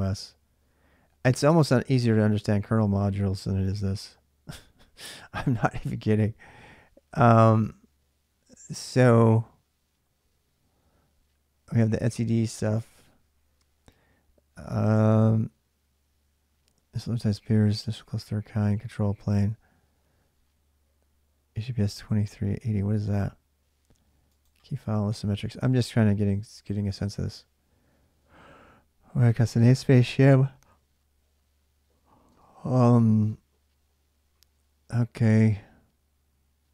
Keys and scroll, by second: 32.1 Return.